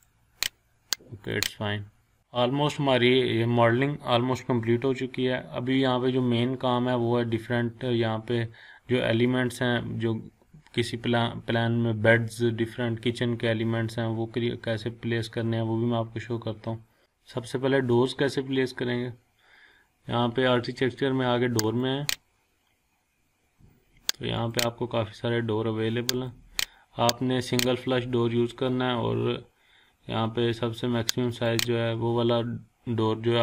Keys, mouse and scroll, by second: 1.8 scroll down 1, 2.2 scroll up 1, 2.7 scroll down 1, 4.7 scroll up 1, 5.6-6.0 scroll down 1, 21.6 click, 24.3 click, 29.1-30.9 scroll down 1, 31.3 click, 32.5-33.4 scroll up 1.